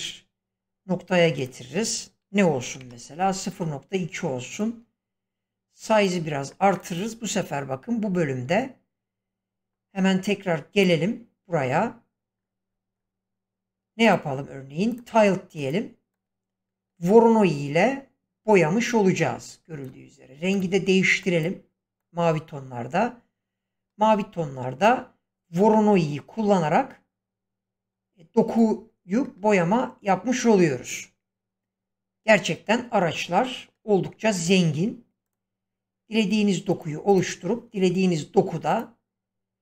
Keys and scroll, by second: 2.5 typing, 2.8 Return.